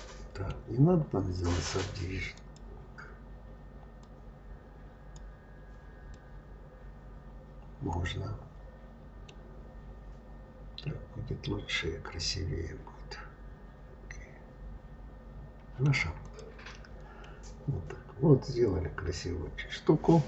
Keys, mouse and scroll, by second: 0.5-0.9 scroll down 3, 2.2-5.2 drag, 6.0-9.0 middle drag, 10.3-11.1 scroll up 3, 11.1-11.5 scroll down 3, 11.6-14.6 middle drag, 16.1 click, 17.1-20.1 middle drag.